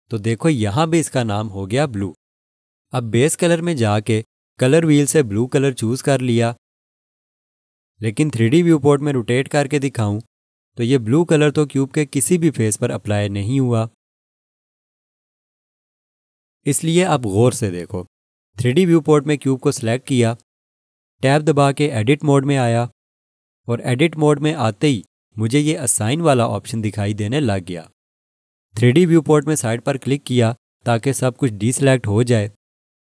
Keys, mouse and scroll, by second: 0.6 click, 10.8 click, 10.9 alt+click, 19.9 click, 23.1 Tab, 30.5 click.